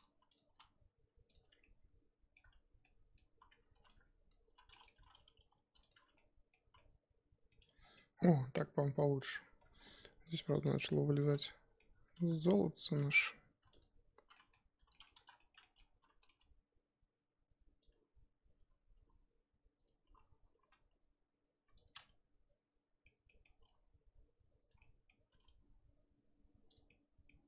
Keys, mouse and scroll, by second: 1.4 Tab, 1.5 scroll down 1, 1.6 middle click, 2.3 scroll down 1, 2.4 Tab, 2.8 middle click, 3.2 z, 4.0 1, 4.3 click, 4.5 z, 4.7 middle click, 4.9 g, 5.9 Tab, 6.1-6.7 middle drag, 6.7 z, 6.8-7.6 middle drag, 7.6 click, 7.8 scroll down 3, 7.9-9.4 middle drag, 9.4-10.3 scroll up 4, 10.3 click, 10.5 Tab, 10.6 middle click, 10.8-11.3 scroll up 2, 11.3-12.2 middle drag, 12.2 z, 13.1 alt+click, 13.8 alt+click, 14.2 z, 14.3 middle click, 15.1 z, 15.4-16.2 shift+middle drag, 16.2 g, 18.9 g, 20.0 o, 22.0-23.4 middle drag, 23.4 scroll down 1, 23.6 s, 24.8 middle click, 25.3 s, 26.9 middle click.